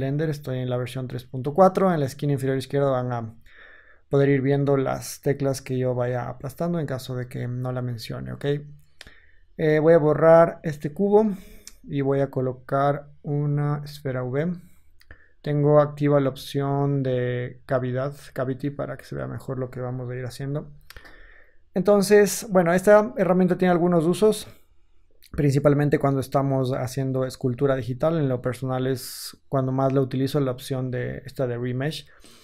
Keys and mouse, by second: 9.5 x, 11.2 shift+a, 20.2 KP_1.